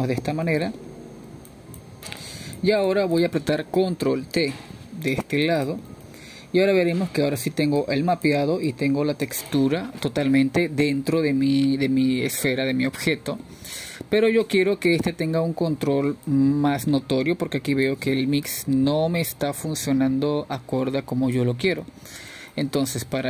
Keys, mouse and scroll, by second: 0.0 click, 0.6-1.6 drag, 1.7 drag, 1.9-3.0 middle drag, 3.0 click, 4.3-4.8 middle drag, 4.8-7.5 drag, 7.5 ctrl+t, 9.2-11.1 middle drag, 11.1-13.3 drag, 15.5-16.0 scroll up 1, 16.0-16.6 middle drag, 16.6 scroll up 2, 17.5-19.7 scroll down 1, 19.7-23.2 drag.